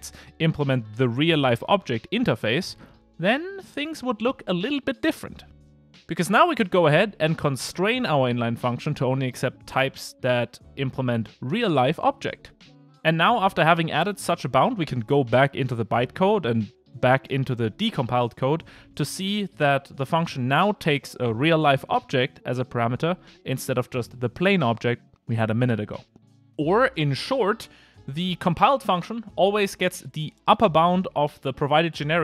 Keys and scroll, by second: 3.1 Return, 10.6 Return, 19.0 super+f.